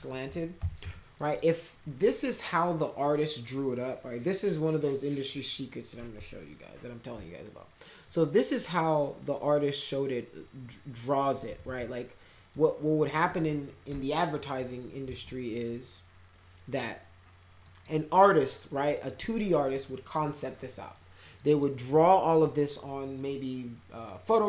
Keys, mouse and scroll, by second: 0.0 alt+middle click, 0.3-1.3 typing, 1.1 middle click, 8.0-11.4 shift+drag, 11.6 ctrl+z, 12.5 click, 13.9 Delete, 15.0 ctrl+z, 17.6 middle click, 18.6 middle click, 20.6 middle click, 21.4 middle click.